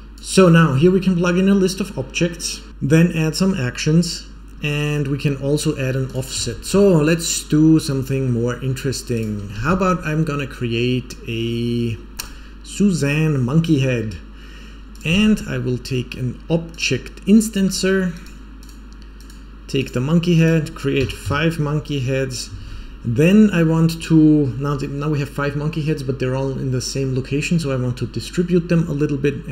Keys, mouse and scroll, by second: 6.0 drag, 6.4 shift+a, 9.0 click, 9.5 shift+a, 14.8 click, 15.0 shift+a, 19.7 click, 20.3-21.5 drag, 22.5 shift+a.